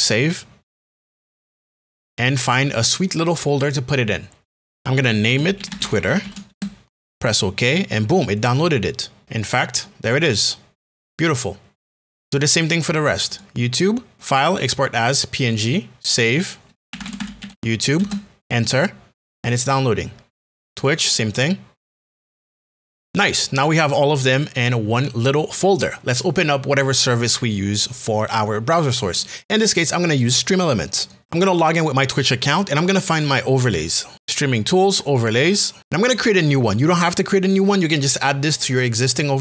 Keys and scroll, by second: 4.6 Return, 5.3 t, 6.2 r, 6.5 Return, 16.6-18.0 typing, 22.2 Return, 22.4 Return, 22.7 Return.